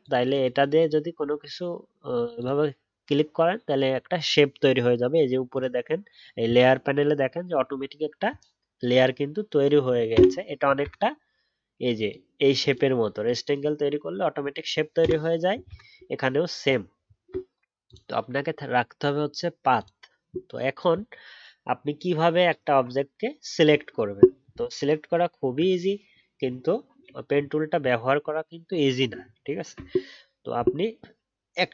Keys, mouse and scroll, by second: 24.6-25.3 alt+scroll down 1, 25.3 alt+scroll down 1, 25.3 alt+scroll up 1.